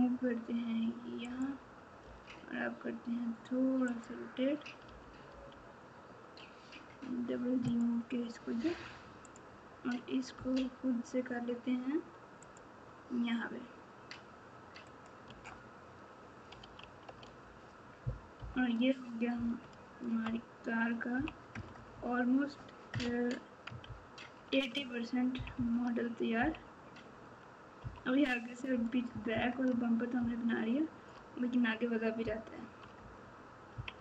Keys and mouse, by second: 2.0 r, 4.8 g, 9.2 click, 10.3 g, 14.9 click, 15.2 Tab, 16.6 alt+z, 18.3 KP_8, 19.3 KP_Subtract, 19.8-21.4 KP_Subtract, 21.5 KP_Add, 21.7 KP_Add, 26.3 KP_1, 27.8 KP_3, 29.1 KP_Add, 29.3 KP_Add, 30.1 ctrl+KP_6, 30.7 ctrl+KP_6, 33.0 KP_Add, 33.7 KP_6, 33.9 KP_6.